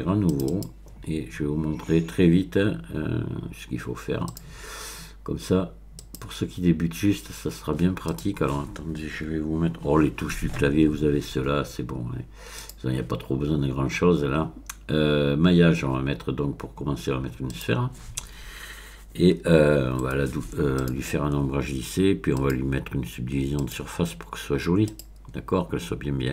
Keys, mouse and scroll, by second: 0.3 click, 4.3 click, 6.0 click, 8.1 click, 12.6 click, 17.5 click, 19.2-19.9 scroll up 1, 20.8 click, 22.4 click, 23.6 click, 24.9 click.